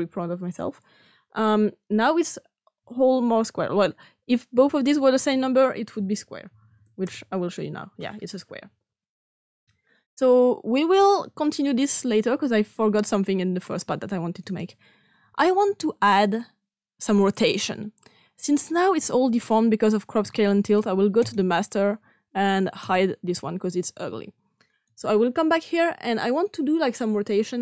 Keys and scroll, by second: 6.4 shift+5, 6.6 shift+5, 7.0 Return.